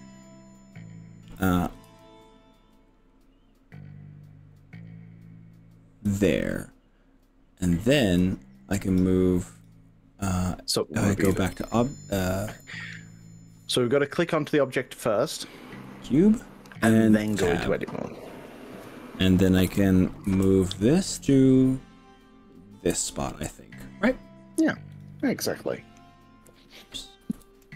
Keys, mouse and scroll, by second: 1.9 x, 6.2 click, 8.2 click, 9.6 click, 11.3 Tab, 15.9 click, 17.3 Tab, 18.2 click, 19.8 g, 20.3 x, 24.9 click, 25.5 middle click, 27.4 KP_1.